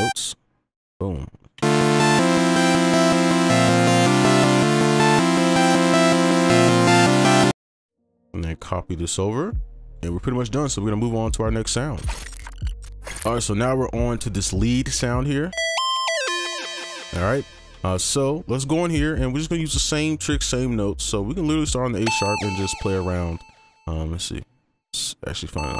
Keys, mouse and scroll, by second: 1.6 space, 2.0 right click, 7.4 space, 7.7 ctrl+a, 8.2 shift+click, 15.7 double click, 21.1 right click.